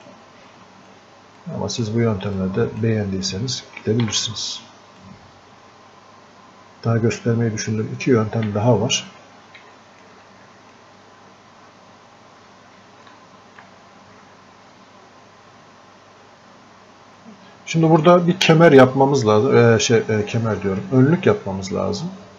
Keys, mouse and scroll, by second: 0.5 click, 1.4 click, 2.4-4.1 drag, 4.1 ctrl+z, 4.6-8.5 drag, 8.5 f, 9.1 click, 9.4 scroll up 1, 9.8 alt+click, 10.3-13.1 drag, 13.4 alt+click.